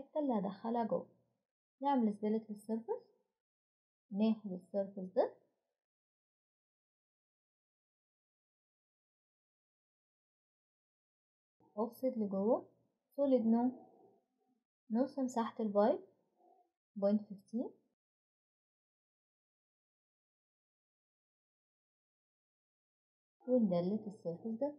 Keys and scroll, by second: 11.6 typing, 16.9 ., 19.2-20.1 typing, 20.3 Return, 23.5 Delete, 24.3-24.7 typing.